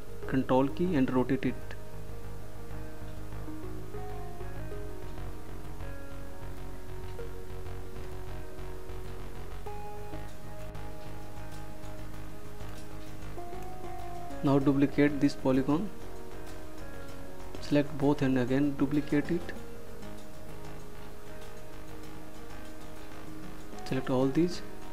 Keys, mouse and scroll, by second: 3.0 ctrl+click, 15.6 ctrl+click, 23.1 ctrl+click.